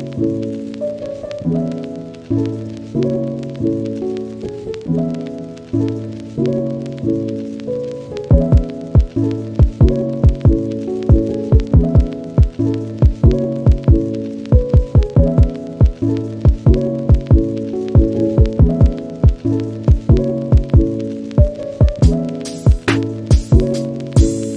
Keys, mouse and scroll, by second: 0.3 f, 0.5 middle click, 0.9 f, 1.1 scroll up 1, 1.2 shift+middle click, 1.8 click, 2.5 shift+middle click, 3.5 middle click, 3.8 click, 4.3 scroll down 1, 4.5 shift+click, 4.9 scroll down 1, 8.5-9.5 scroll down 1, 9.5 scroll down 1, 9.7 f, 9.9 scroll up 2, 10.1 shift+click, 10.3 scroll down 1, 10.4 middle click, 10.5 scroll up 1, 10.7 shift+click, 10.9 scroll down 1, 11.1 shift+click, 11.5 scroll up 1, 11.6 shift+click, 11.8 middle click, 12.0 shift+click, 12.2 scroll down 1, 12.4 middle click, 12.6 shift+click, 12.9 shift+middle click, 13.2 f, 13.3 shift+click, 13.7 middle click, 13.9 shift+click, 14.2 scroll down 2, 14.4 middle click, 14.5 scroll up 1, 14.7 shift+click, 15.0 scroll down 1, 15.1 middle click, 15.3 shift+click, 15.6 middle click, 17.3 shift+middle click, 17.6 scroll up 1, 18.0 middle click, 18.3 shift+click, 18.7 scroll down 1, 18.8-23.3 shift+drag, 23.3 scroll down 1, 23.4 shift+middle click, 23.5 scroll up 1, 23.7 middle click, 24.0 shift+click, 24.4 middle click.